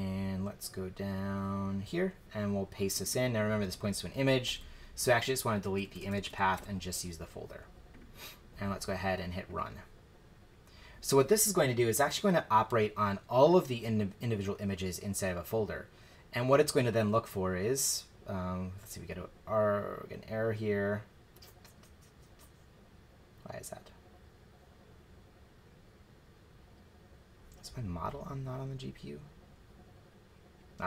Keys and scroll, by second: 3.6 super+v, 4.5 BackSpace, 5.3 BackSpace, 5.9 BackSpace, 6.5 BackSpace.